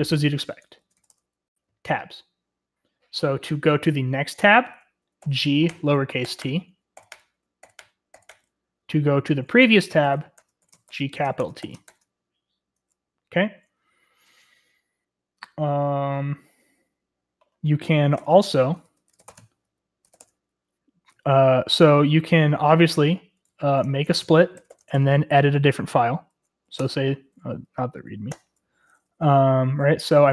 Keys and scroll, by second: 0.8 typing, 5.2-8.7 typing, 9.8-12.3 typing, 17.9-20.5 typing, 23.6 ctrl+w, 23.8 ctrl+v, 24.5 typing, 24.9 Tab, 26.7 Return, 28.0-30.2 typing.